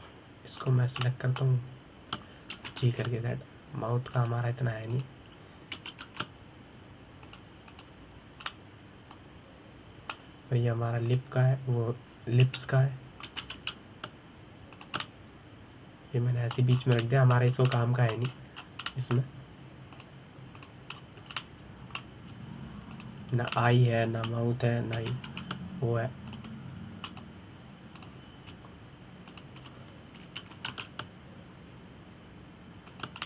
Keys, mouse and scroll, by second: 0.6-2.2 middle drag, 2.2 click, 2.7-4.2 middle drag, 4.2 g, 6.6 click, 7.4 g, 9.0 click, 9.4 click, 10.2-12.7 middle drag, 12.7 click, 14.2 l, 14.9 g, 16.7-18.4 middle drag, 18.4 scroll down 5, 18.7 middle click, 19.4 middle click, 20.0 scroll up 2, 20.3 scroll down 3, 20.6-21.6 middle drag, 21.6 click, 22.3 click, 22.6-23.0 scroll up 1, 23.0-24.6 middle drag, 24.6 shift+click, 25.2-26.6 middle drag, 26.6 g, 28.8 click, 29.6 click, 31.0 shift+click, 32.1 g.